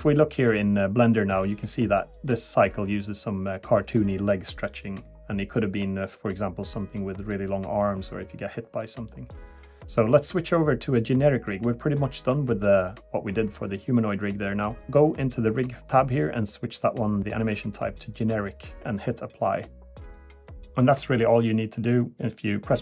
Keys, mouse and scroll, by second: 0.7 click, 8.6 click.